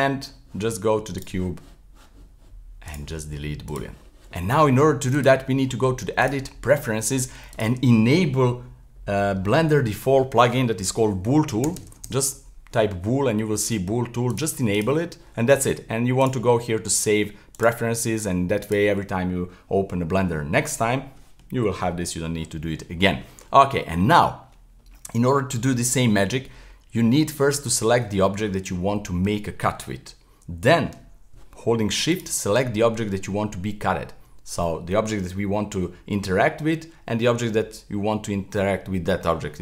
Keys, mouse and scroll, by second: 1.2 right click, 2.9 click, 3.7-8.2 drag, 23.0-26.8 middle drag, 27.6 right click, 32.1 shift+right click.